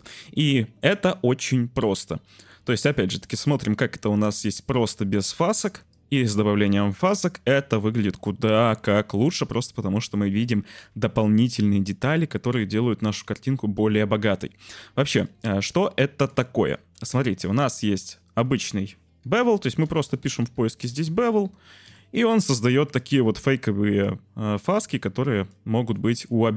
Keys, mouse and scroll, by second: 2.2 middle click, 3.2 click, 6.0-6.6 middle drag, 15.3 click, 16.1 click, 16.9 ctrl+x, 17.8 shift+a, 19.8 BackSpace, 20.9 BackSpace, 23.7 click, 24.6-25.5 drag.